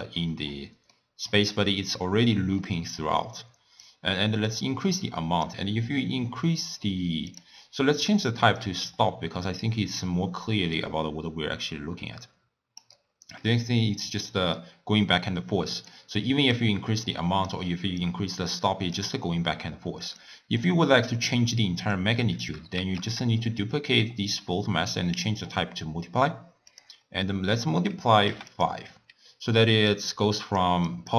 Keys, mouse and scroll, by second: 0.5-0.9 scroll up 3, 0.9-3.8 middle drag, 3.8-6.9 drag, 7.3-12.6 drag, 15.7 middle click, 16.6-20.3 drag, 22.0 click, 23.1 shift+d, 24.4-28.7 drag, 29.7-31.1 typing, 30.0 click, 30.9 click.